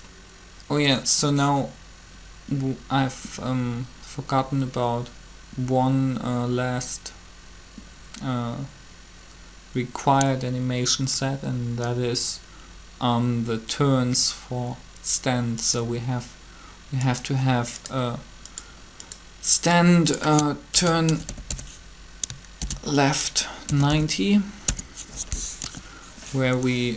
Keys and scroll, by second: 20.6-22.3 typing, 23.4-24.2 typing, 24.6 Return, 25.9 Return, 26.8 7.